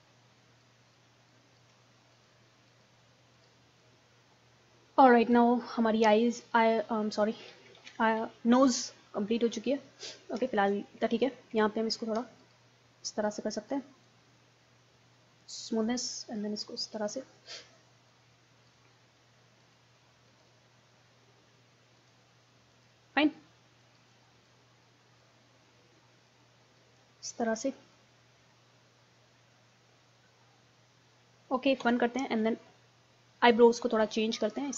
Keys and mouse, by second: 0.4 middle click, 0.6-3.8 drag, 4.7 middle click, 6.0 middle click, 6.2-7.8 drag, 7.8 ctrl+z, 9.1-10.3 middle drag, 10.6-11.6 middle drag, 12.4-18.9 drag, 18.9 middle click, 27.3-29.5 middle drag, 29.8 middle click, 31.8 KP_1, 32.1 middle click.